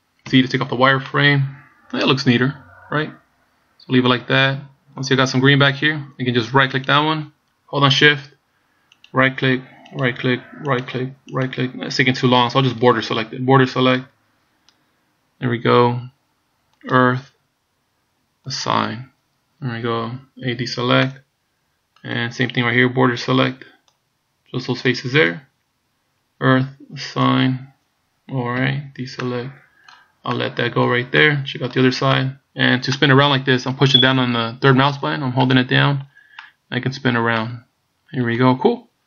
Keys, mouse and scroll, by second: 0.3 z, 1.1 middle click, 5.3-5.8 scroll up 1, 6.9 right click, 9.1 shift+right click, 10.0 shift+right click, 10.8 shift+right click, 10.9 shift+right click, 11.4 shift+right click, 13.5 b, 17.0 click, 18.6 click, 20.7 a, 21.1 middle click, 23.4 b, 27.4 click, 28.8 a, 29.3 middle click, 30.4 middle click, 31.3 middle click, 32.2 middle click, 33.0 middle click, 34.3 middle click, 35.5 middle click, 36.5 middle click, 37.5 middle click.